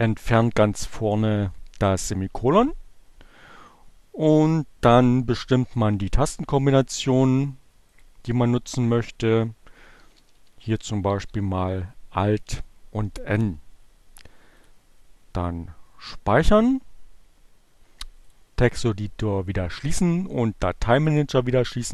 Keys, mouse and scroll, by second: 4.5 click, 8.1 click, 8.5 <, 9.5-10.9 typing, 12.2 n, 14.4 click, 17.7 click, 20.3 click.